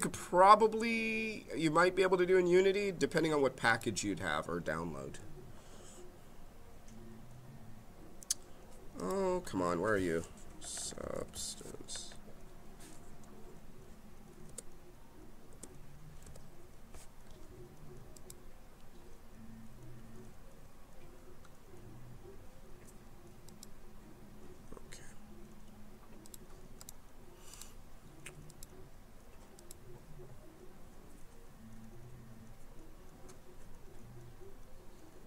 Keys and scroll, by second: 11.5 b, 14.4 BackSpace, 16.2 b.